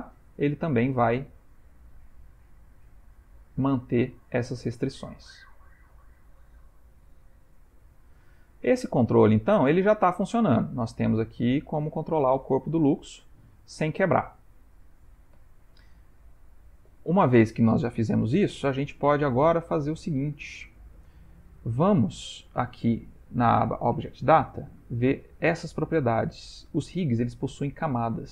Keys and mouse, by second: 3.7 ctrl+middle click, 4.1 middle click, 4.7 middle click, 5.4 ctrl+middle click, 6.1 middle click, 8.1 middle click, 8.9 g, 15.8 ctrl+middle click, 16.4 shift+middle click, 20.4 click, 21.7 ctrl+middle click, 24.5 click, 24.7 click.